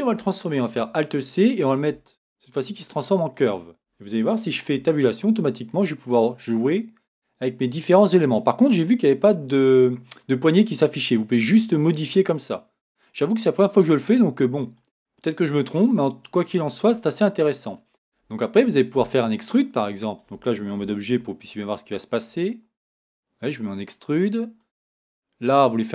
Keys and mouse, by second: 0.7 alt+c, 3.4 alt+c, 4.7 Tab, 12.0-13.8 middle drag, 21.0 Tab, 24.2 middle click.